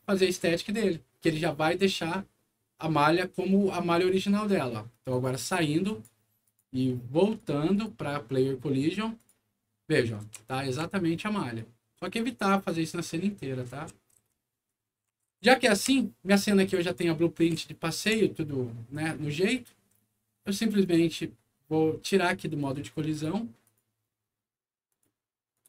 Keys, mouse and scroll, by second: 5.0 click, 5.8 click, 6.4 click, 7.2 click, 7.6 click, 9.1 click, 10.0-11.5 right drag, 10.2 a, 10.5 w, 11.9 click, 12.6-15.8 right drag, 14.2 s, 14.7 w, 15.3 e, 15.7 s, 16.8-18.8 right drag, 17.4 a, 18.0 d, 20.7 click, 23.0 click, 23.6 click, 24.8 click, 25.5 right click.